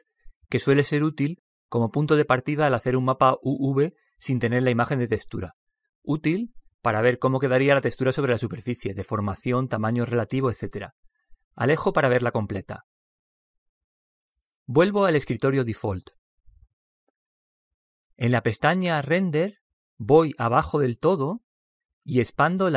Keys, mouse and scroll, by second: 16.3 click, 19.0-22.0 drag, 22.3-22.7 drag.